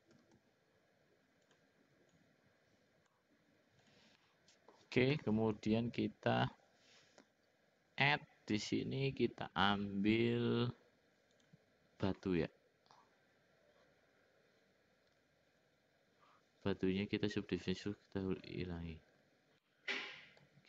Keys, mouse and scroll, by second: 0.1 s, 2.0-3.1 drag, 3.8 click, 4.1 middle click, 8.0-11.5 drag, 17.7 click, 19.7 middle click.